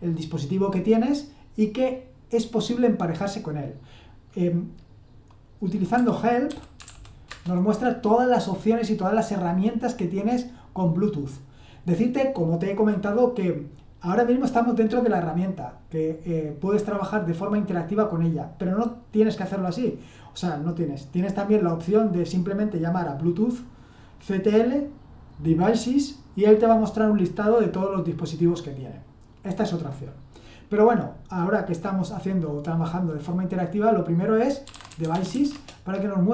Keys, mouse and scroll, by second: 5.9-7.8 typing, 34.4-35.8 typing.